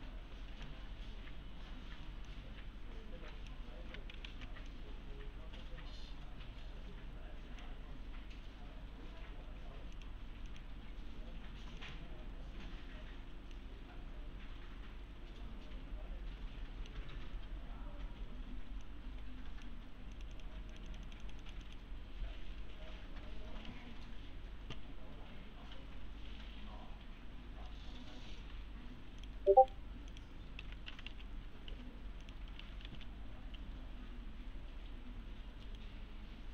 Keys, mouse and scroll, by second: 4.3 ctrl+z, 4.7-7.8 click, 10.0 click, 13.5-17.0 middle click, 18.8-19.8 click, 29.2 click, 29.5 right click, 30.1 click, 30.6 alt+w, 30.7-33.4 typing, 31.2-31.7 scroll down 1, 32.2 click, 32.5 scroll up 1, 33.2 scroll down 1, 33.9-34.2 scroll up 1, 35.7 right click.